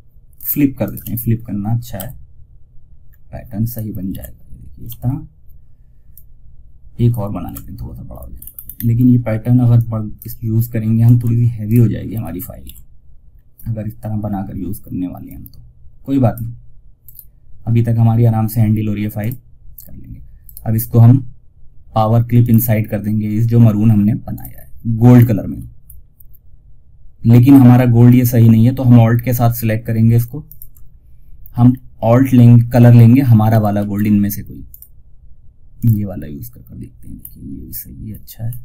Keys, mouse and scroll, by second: 0.1 right click, 0.6 scroll up 1, 2.9 click, 3.4 ctrl+r, 5.4-6.7 drag, 6.7 ctrl+r, 7.6 ctrl+scroll up 1, 9.0-10.9 drag, 10.9 ctrl+right click, 11.4 ctrl+r, 12.6-13.0 scroll down 1, 14.5-16.3 drag, 16.3 right click, 18.5 click, 18.6 click, 19.7 right click, 21.7 click, 24.8-25.2 scroll up 1, 29.5 alt+Num_Lock, 29.5 scroll up 1, 29.8 alt+click, 30.8 scroll down 1, 33.1 ctrl+alt+shift+s, 34.0 click, 36.4-36.8 scroll up 1.